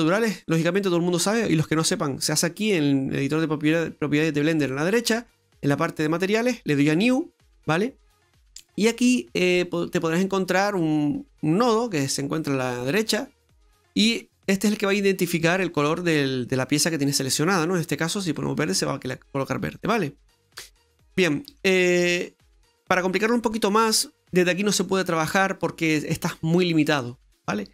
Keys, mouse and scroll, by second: 5.6 click, 6.9 click, 12.1-13.3 scroll down 2, 15.5 click, 17.1 click, 20.2 middle click.